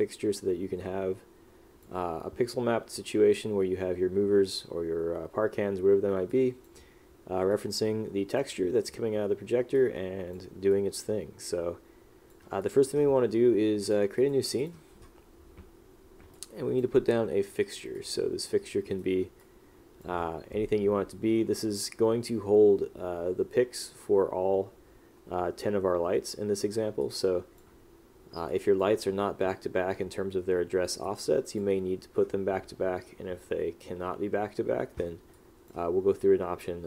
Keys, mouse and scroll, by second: 6.4 click, 7.6 click, 9.9 click, 10.8 click, 12.7 click, 16.5 click, 19.0 right click, 19.5 click, 27.1 click, 28.6 click, 35.5 click.